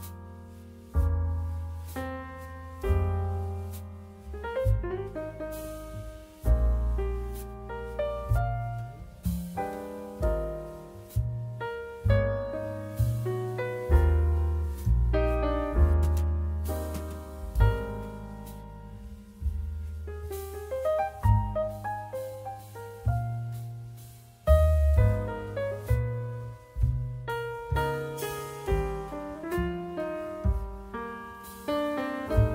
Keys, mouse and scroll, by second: 6.3 Tab, 7.1-9.5 right drag, 7.7 z, 9.5 middle click, 9.6-12.0 right drag, 12.0-14.9 middle drag, 12.2-13.2 right drag, 14.8 click, 14.8-30.7 right drag, 15.8-30.7 drag, 15.8-30.7 middle drag.